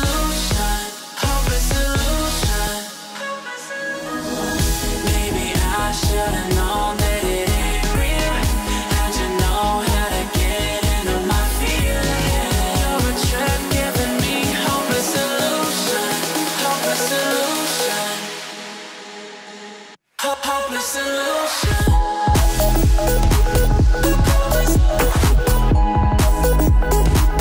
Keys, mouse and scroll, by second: 3.6-4.5 ctrl+alt+scroll up 2, 4.6-5.7 ctrl+alt+scroll down 2, 5.7-7.0 ctrl+click, 15.4-16.7 ctrl+shift+drag, 17.4-18.4 ctrl+drag, 19.4-20.3 ctrl+alt+scroll down 2, 20.3-21.0 ctrl+alt+scroll down 1, 21.0-22.0 ctrl+alt+scroll down 1, 22.0 ctrl+alt+scroll up 1, 22.4-23.9 ctrl+drag.